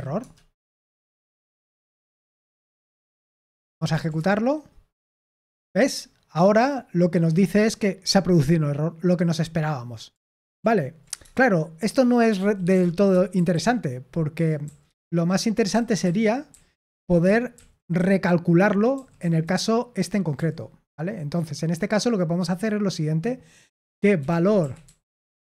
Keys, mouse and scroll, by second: 0.0-4.5 typing, 10.2 ctrl+p, 10.5 ctrl+p, 11.1 Return, 12.3-17.9 typing, 19.1 typing, 24.0-25.5 typing.